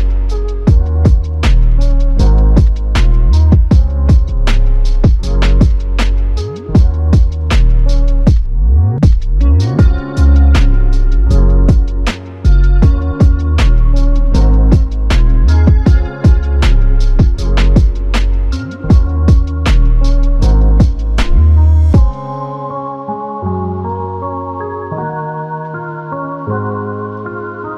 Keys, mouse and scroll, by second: 0.6 ctrl+click, 1.6 ctrl+click, 2.5 ctrl+click, 3.9 ctrl+click, 8.6 ctrl+click, 10.6 w, 15.2 alt+click, 19.2 ctrl+click, 20.5 ctrl+click, 23.1 ctrl+click.